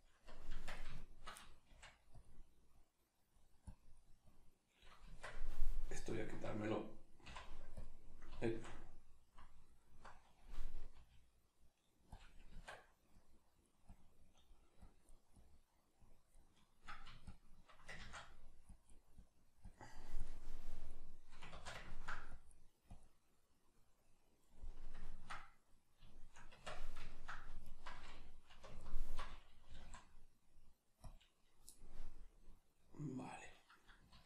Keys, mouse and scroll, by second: 0.0 click, 0.5 Tab, 1.0-2.2 shift+middle drag, 1.7 f, 2.2 click, 5.0 Tab, 5.0-6.1 drag, 6.1 alt+right click, 7.2 x, 9.6 alt+right click, 10.9 g, 12.2 click, 12.5 Tab, 13.2-21.8 drag, 18.0 ctrl+z, 21.5 ctrl+z, 21.8 ctrl+middle click, 22.3-23.9 drag, 23.9-27.6 middle drag, 26.5 Tab, 27.6 alt+right click, 28.7 alt+right click, 29.7 g, 31.1 click, 31.7-34.1 middle drag, 34.1 alt+q.